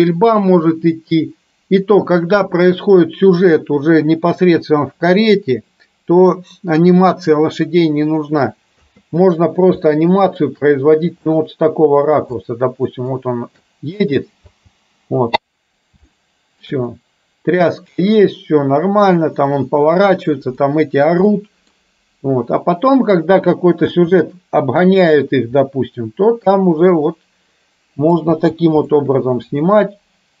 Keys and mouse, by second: 0.7 middle click, 9.0 space, 10.0 shift+middle click, 11.3-12.3 middle drag, 12.5-13.2 shift+middle drag, 14.6 space, 16.2-16.8 shift+middle drag, 17.1-17.7 middle drag, 20.7 middle click, 21.3 middle click, 24.0 space, 25.7-28.2 middle drag, 28.3 space, 29.0-30.4 middle drag.